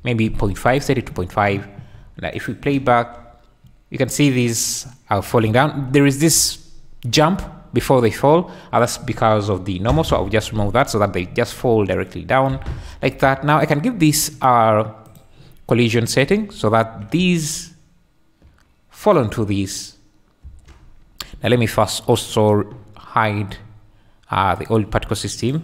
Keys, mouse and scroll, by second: 2.3 shift+click, 2.8 space, 5.4 Escape, 8.9-10.1 drag, 10.5 space, 12.5 Escape, 13.0 `, 15.0 click, 16.2 drag, 16.6 `, 17.2 space, 17.8 `, 19.1 `, 20.5 space, 22.1 click, 24.6 click.